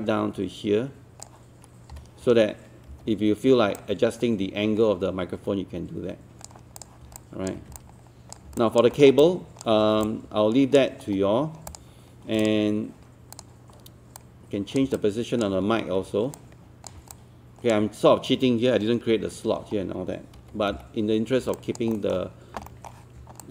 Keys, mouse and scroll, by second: 1.9-2.9 typing, 3.8-6.7 drag, 7.2 alt+click, 8.6 alt+click, 9.0 middle click, 9.2 alt+click, 10.1 alt+click, 11.0-11.7 scroll up 1, 11.7 click, 15.0 alt+click, 16.4 click, 17.1-19.7 alt+drag, 19.7-20.4 scroll down 1, 20.4 z, 20.7 z, 21.6 alt+click, 21.9 middle click, 22.7 alt+middle click, 23.4 alt+click.